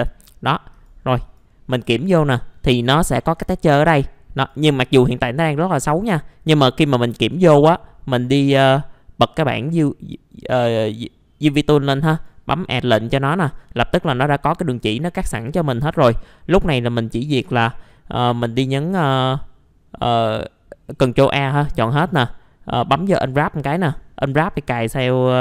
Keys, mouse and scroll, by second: 0.7 click, 2.2-2.8 scroll up 1, 2.8 middle click, 4.3 click, 5.4-7.3 scroll down 1, 7.3 right click, 8.5 click, 13.4 middle click, 14.6 scroll up 1, 18.8 ctrl+a, 22.1-23.2 drag.